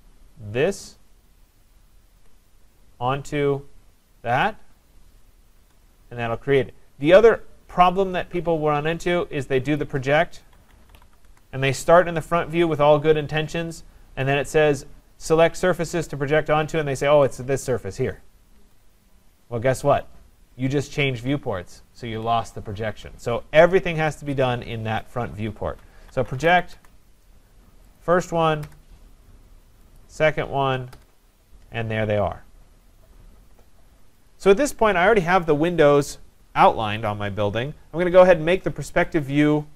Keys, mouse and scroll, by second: 0.8 click, 2.1-2.9 typing, 4.5 click, 5.6 Return, 8.2 ctrl+z, 9.8 click, 10.3-11.5 typing, 13.3-15.0 typing, 17.4 click, 18.5 Return, 24.2 click, 25.9-27.0 typing, 28.0 click, 28.7 Return, 29.1-29.9 typing, 30.0 click, 30.9 Return, 34.3 click, 39.0 click, 39.2 click.